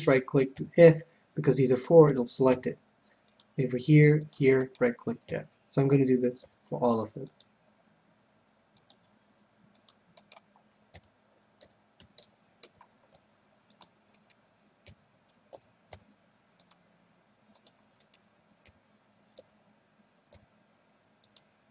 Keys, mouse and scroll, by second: 0.5 f, 2.0 a, 2.5 c, 4.7-6.3 right drag, 5.3 f, 5.9 a, 6.3 c, 10.2-12.0 right drag, 10.9 f, 11.5 a, 12.1-13.7 middle drag, 13.1 c, 14.2-16.1 right drag, 14.8 f, 15.5 a, 16.0 c, 18.0-19.8 right drag, 18.6 f, 19.3 a, 20.3 c.